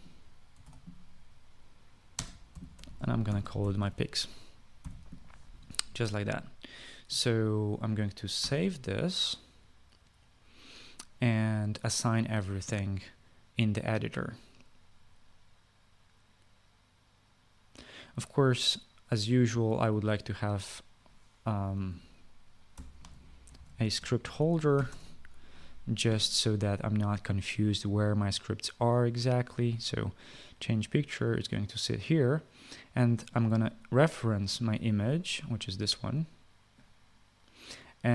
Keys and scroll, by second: 1.0-1.7 typing, 2.8-5.5 typing, 9.1 ctrl+s, 22.0-25.9 typing.